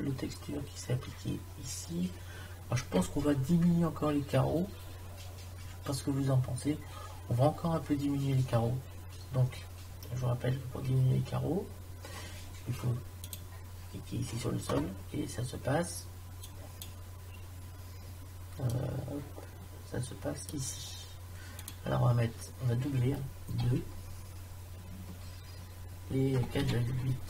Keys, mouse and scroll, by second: 16.8 click.